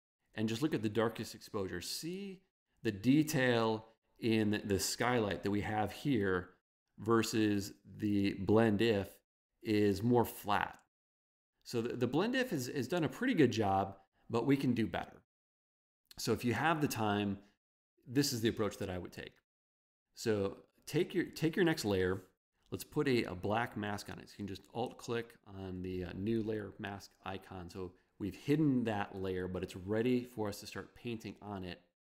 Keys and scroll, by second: 5.2 v.